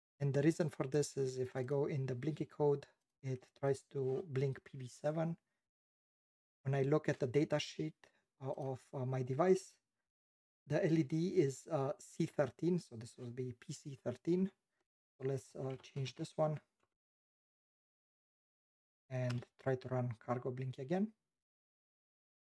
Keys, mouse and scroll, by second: 1.7 double click, 3.1 click, 3.2 click, 3.7 click, 3.8 click, 15.3-18.3 typing.